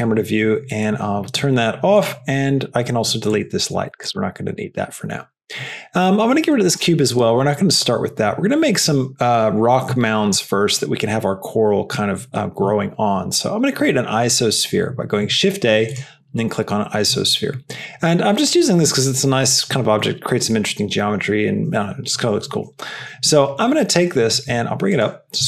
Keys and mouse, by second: 3.3 click, 3.9 x, 6.7 x, 24.9 g.